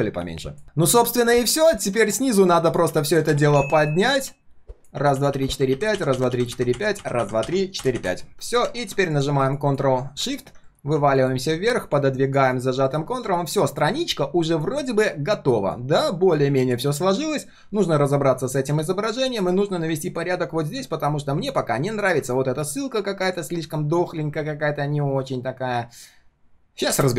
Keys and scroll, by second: 10.6 ctrl+shift+3, 12.7 ctrl+shift+3.